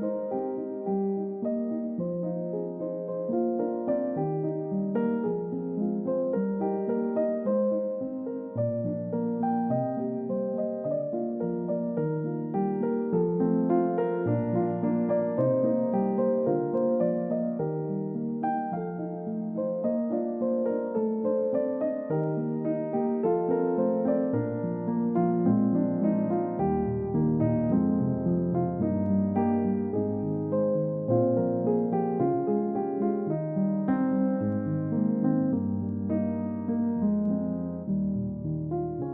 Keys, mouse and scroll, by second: 4.4-4.8 scroll down 1, 7.2 ctrl+d, 9.5 ctrl+z, 9.9 ctrl+z, 11.7 scroll up 1, 15.0 scroll down 1, 16.4 middle click, 18.2 scroll down 1, 21.1 middle click, 23.2-23.6 scroll down 1, 23.8 middle click, 29.4-29.8 scroll up 1, 29.8-30.1 scroll down 1, 30.1 middle click, 30.6-31.4 scroll down 1, 31.4 middle click, 32.2-32.6 scroll up 1, 32.6 middle click, 35.6 scroll down 1, 35.8 middle click, 37.0-37.5 scroll up 1.